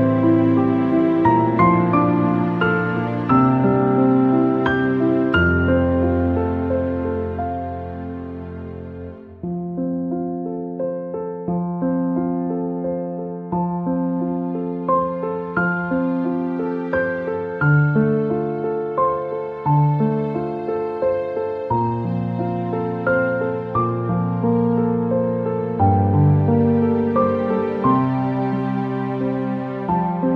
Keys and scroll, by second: 23.3 Return, 24.2 Delete, 29.1 ctrl+d.